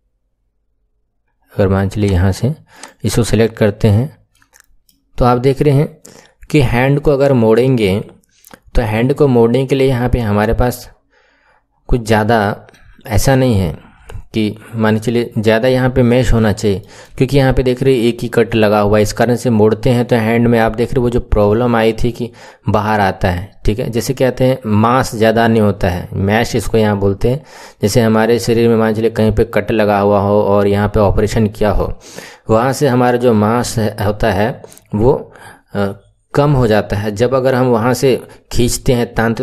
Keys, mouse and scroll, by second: 1.2 click, 1.9 click, 2.7 click, 3.2 Tab, 3.8-4.2 scroll down 2, 4.2-7.4 middle drag, 14.5-15.2 scroll down 1, 15.2-15.8 scroll up 6, 16.3-19.5 shift+middle drag.